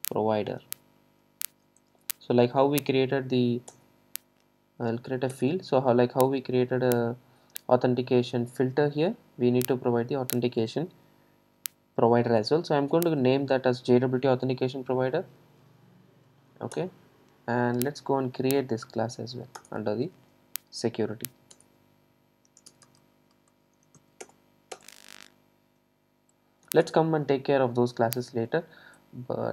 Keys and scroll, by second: 3.8 alt+Return, 15.7 Escape, 19.7 alt+Return.